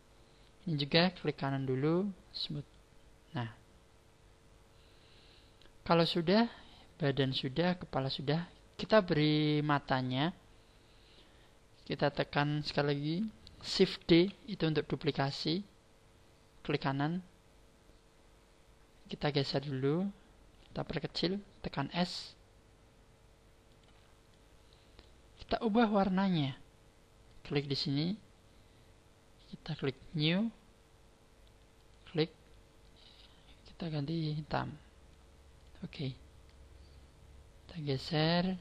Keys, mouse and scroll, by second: 1.0 right click, 2.5 click, 14.0 shift+d, 16.8 right click, 19.1 click, 21.8 s, 23.7 click, 24.2 click, 25.9-27.3 scroll down 6, 27.3 click, 29.9 click, 31.7 click, 35.5 click, 36.3 click, 38.3 middle click.